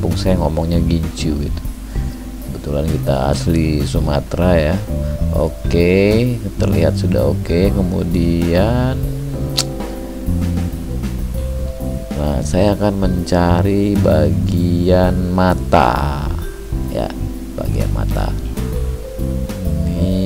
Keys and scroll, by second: 6.5 ctrl+d.